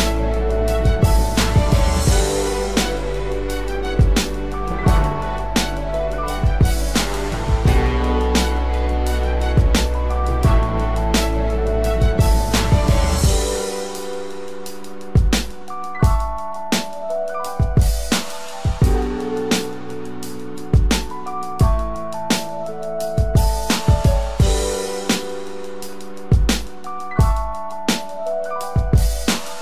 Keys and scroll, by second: 3.7 ctrl+-, 4.1 ctrl+=, 5.5 ctrl+=, 21.7 ctrl+t.